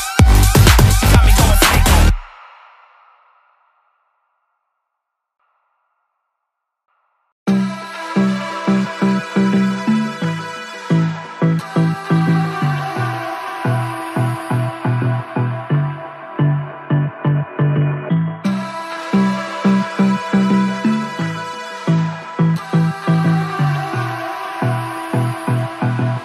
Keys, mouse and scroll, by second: 0.1 ctrl+z, 0.4 ctrl+z, 0.7-2.0 typing, 3.6-4.6 typing, 4.4 double click, 4.9 alt+scroll down 1, 5.0 alt+scroll up 1, 5.3 alt+scroll down 1, 7.4 double click, 9.8 ctrl+z, 9.9 ctrl+z, 13.5 alt+scroll down 1, 13.6 alt+scroll up 1, 14.1 alt+scroll down 1, 14.2 alt+click, 14.7 shift+click, 21.3 alt+scroll down 1, 21.3 alt+scroll up 1, 22.3 alt+scroll down 1.